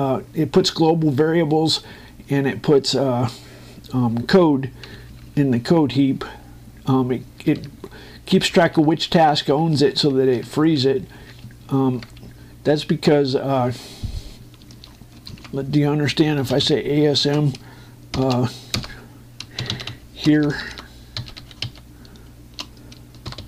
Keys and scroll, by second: 5.6 Down, 10.1 Down, 12.1 Right, 12.7 Up, 15.5 shift+Escape, 17.6 m, 18.0 space, 19.5 Return.